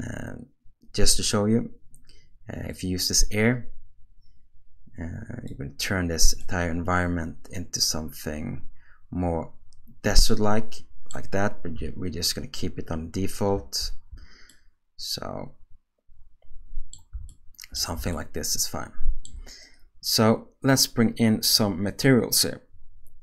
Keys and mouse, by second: 2.7-5.5 drag, 6.4-11.1 middle drag, 13.7 ctrl+z, 14.5-16.9 middle drag, 17.3 shift+middle click, 18.2-19.2 ctrl+middle drag.